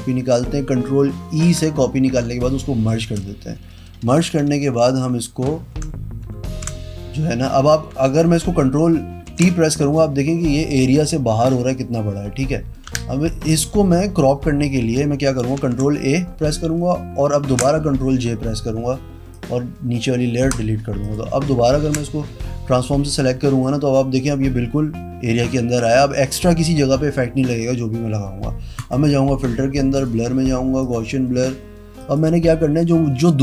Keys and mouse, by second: 1.3 ctrl+e, 6.5 ctrl+t, 7.9 Escape, 9.2 ctrl+t, 12.8 Escape, 15.5 ctrl+a, 17.4 ctrl+j, 19.3 click, 20.4 Pause, 20.9 click, 21.7 ctrl+t, 25.8 Escape, 28.7 click, 29.9 click, 30.7 click, 31.9 click.